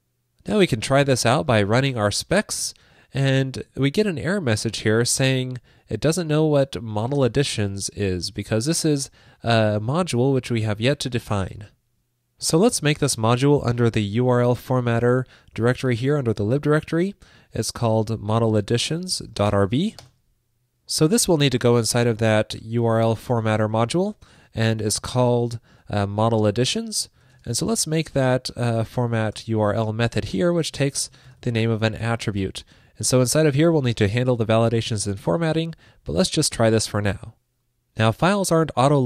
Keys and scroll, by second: 20.5 super+s, 32.5 super+s.